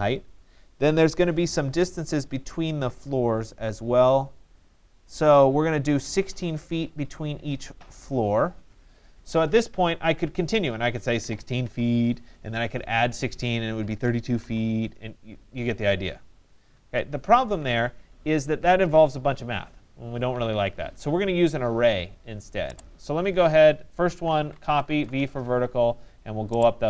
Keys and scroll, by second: 10.7 1, 11.3 6, 12.0 Return, 13.6-14.5 typing, 16.8 ctrl+z, 17.5 Escape, 18.5 ctrl+z, 20.4 Escape, 24.2 Return.